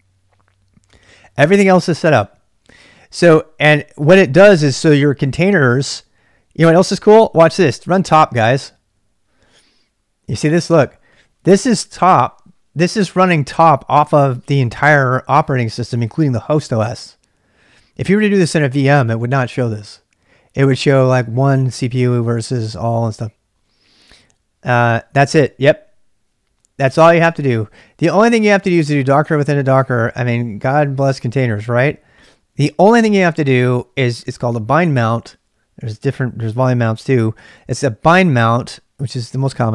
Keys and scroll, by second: 7.5-8.4 typing, 11.7 typing, 26.9 q, 28.9-29.9 typing, 31.3 ctrl+[, 31.4 k.